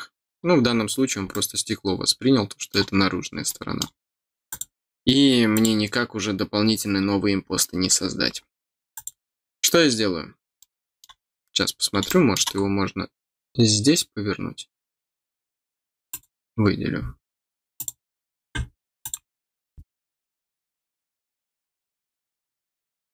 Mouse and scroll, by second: 0.3-0.7 scroll down 4, 1.3-2.7 middle drag, 3.4 middle click, 4.4 click, 5.5 click, 8.9 click, 10.5 middle click, 12.0 middle click, 12.6 middle click, 16.0 click, 17.7 click, 19.0 click.